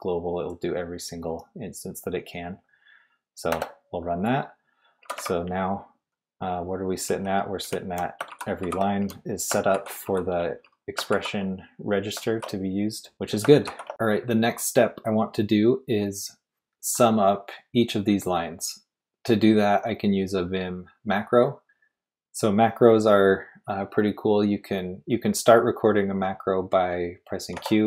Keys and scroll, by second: 1.1 typing, 3.5 typing, 5.0 typing, 6.8-11.1 typing, 12.2-13.9 typing, 27.5 typing.